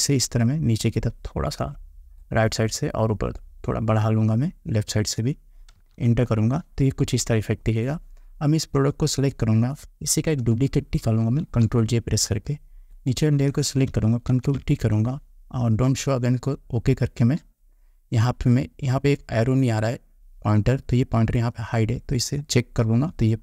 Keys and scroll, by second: 5.9 Return.